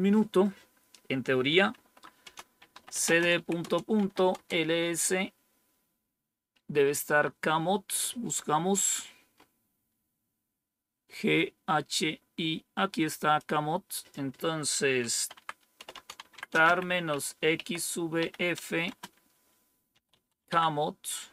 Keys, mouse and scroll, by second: 1.7-4.6 typing, 9.3 scroll up 1, 12.8 click, 13.9 click, 14.7-21.2 typing.